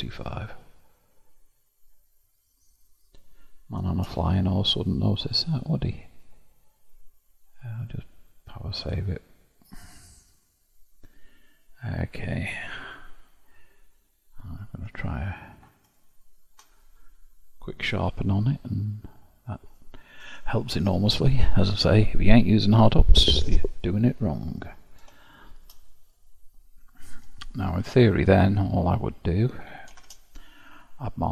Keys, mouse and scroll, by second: 0.1-0.6 scroll down 1, 0.6-2.2 middle drag, 2.2-2.8 scroll down 8, 2.8 scroll down 1, 3.0-4.1 scroll up 1, 4.1-4.8 scroll up 5, 4.8-7.8 middle drag, 8.1-14.8 drag, 14.8 q, 17.0-18.4 middle drag, 18.4-19.6 scroll up 2, 20.2 ctrl+s, 24.5-25.2 scroll down 4, 25.2-27.7 shift+middle drag, 27.7 KP_7, 29.9 shift+a.